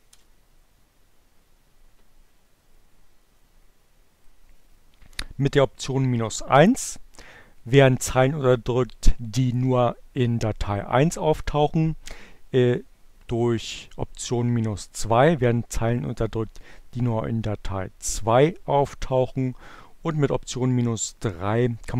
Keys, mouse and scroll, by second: 3.8-21.9 drag.